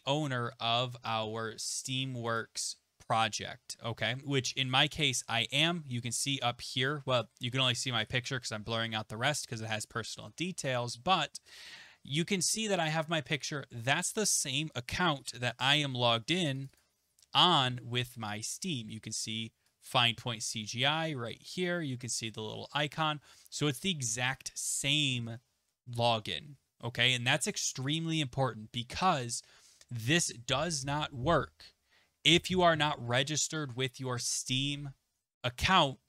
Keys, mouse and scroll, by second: 2.4 click, 15.4 click, 16.7 click, 16.8 click, 19.7 click, 20.0 click.